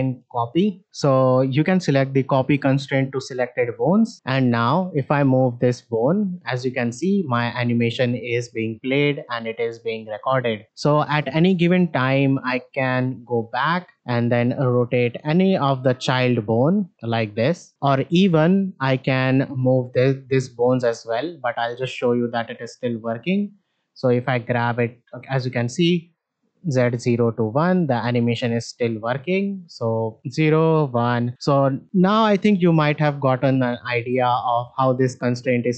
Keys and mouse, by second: 5.4 click, 5.6-11.2 drag, 12.8 click, 13.6-13.9 ctrl+middle drag, 14.1 click, 17.0 click, 17.4 r, 23.8-27.7 drag, 28.0-28.6 shift+middle drag, 29.2-35.7 drag.